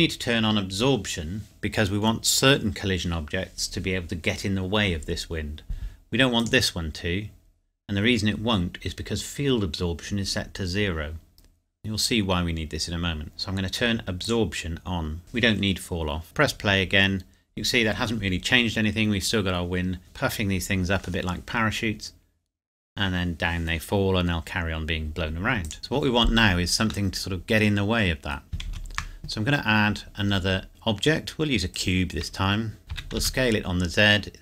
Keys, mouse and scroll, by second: 6.4 click, 13.2 click, 16.2 click, 25.7 click, 27.1 middle click, 28.6 shift+a, 31.7 click, 32.9 s, 33.2 z.